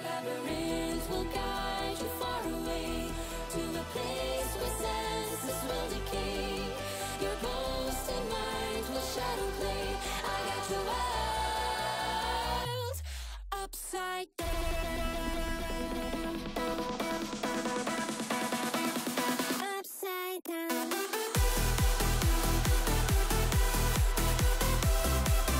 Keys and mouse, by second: 0.0 shift+a, 1.9 click, 3.5 click, 4.2 shift+click, 6.1 ctrl+click, 7.0 ctrl+p, 9.1 click, 9.7 click, 10.1 shift+s, 11.0 shift+a, 13.2-13.5 shift+drag, 15.4 ctrl+p, 16.9 KP_0, 19.4 click, 20.3 click, 21.2-22.0 drag, 23.2 click.